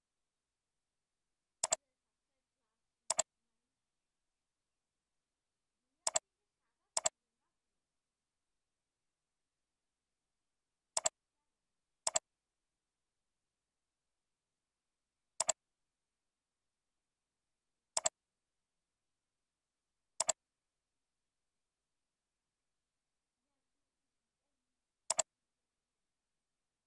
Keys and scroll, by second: 8.3 ctrl+v.